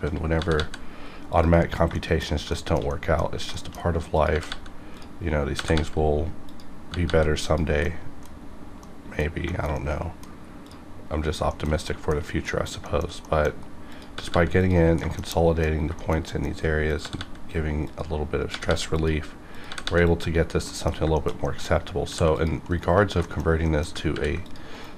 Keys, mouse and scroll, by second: 0.3 shift+g, 1.3 shift+click, 1.6 shift+scroll down 1, 1.9 middle click, 2.2 scroll down 1, 2.5 shift+middle click, 2.9 middle click, 3.5 shift+middle click, 3.7 shift+middle click, 4.1 click, 4.3 g, 4.5 g, 4.9 click, 5.5 g, 5.7 g, 6.4 click, 6.9 g, 7.0 g, 7.4 click, 7.8 middle click, 8.3-8.8 scroll down 1, 8.8 middle click, 9.1 middle click, 9.2 scroll down 1, 9.5 shift+middle click, 9.7 shift+middle click, 10.6 click, 10.6 click, 11.5 shift+middle click, 11.8 middle click, 12.8 shift+middle click, 13.2 middle click, 13.9 click, 14.1 g, 14.3 g, 14.6 click, 15.0 shift+middle click, 15.2 shift+middle click, 15.3 middle click, 15.6 scroll down 2, 16.0 shift+middle click, 16.3 middle click, 16.9 click, 17.0 g, 17.1 g, 17.8 click, 18.5 g, 18.7 g, 18.9 click, 19.7 g, 19.8 g, 20.0 click, 20.4 scroll down 1, 20.7 middle click, 21.1 shift+middle click, 21.4 middle click, 22.0 ctrl+r, 22.3 click, 22.7 right click, 23.1 right click, 23.2 shift+middle click, 23.6 middle click, 24.1 ctrl+r, 24.4 click, 24.7 right click.